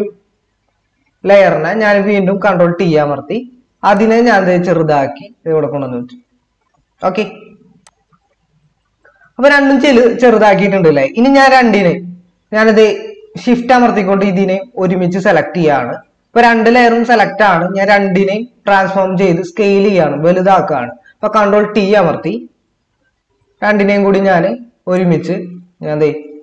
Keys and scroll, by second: 2.5 ctrl+t, 21.5 ctrl+t.